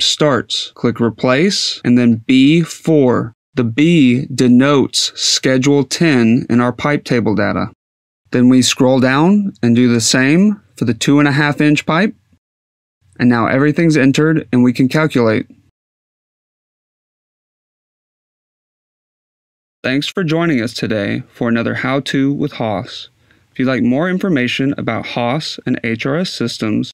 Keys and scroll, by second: 1.8 b, 2.4 4, 11.6-13.0 typing.